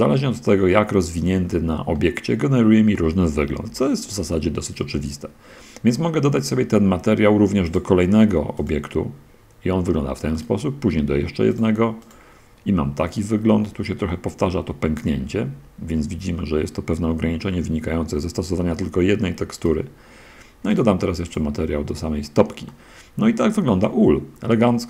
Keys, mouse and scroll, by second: 0.2 click, 1.0 click, 2.1-4.0 drag, 4.2 shift+click, 4.6 middle click, 7.6 click, 8.9 click, 10.7 right click, 11.8 click, 19.6 right click, 21.0 click, 21.2 click, 22.6 middle click, 23.7-24.8 middle drag.